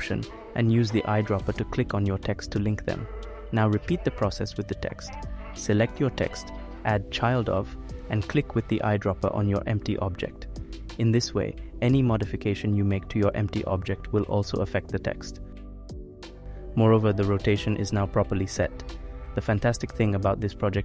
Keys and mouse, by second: 3.3 click, 4.7 click, 6.0-7.4 drag, 10.8 click, 12.0 g, 12.6 g, 13.4 ctrl+z, 13.9 ctrl+z, 14.7 click, 15.2-16.4 drag, 16.8 ctrl+z, 17.8 click, 18.7-20.0 drag.